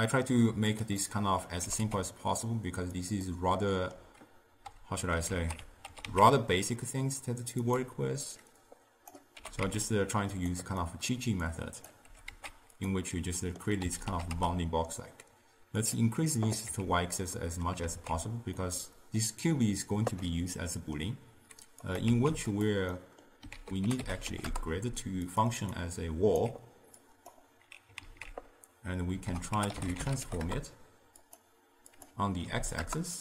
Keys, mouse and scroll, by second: 1.1 middle click, 1.7 g, 3.4-5.4 middle drag, 5.4 alt+z, 6.0 s, 8.7 click, 9.5 g, 10.9 middle click, 11.6 click, 12.2 g, 13.2 middle click, 14.0 a, 14.2 s, 16.8 Tab, 17.5-18.0 middle drag, 18.0 alt+z, 18.7-22.0 middle drag, 22.0 click, 22.2 shift+d, 23.0 middle click, 23.6 ctrl+a, 25.8-27.1 alt+right drag, 27.1-28.1 drag, 28.1 alt+z, 29.4 ctrl+a, 32.0-33.2 drag.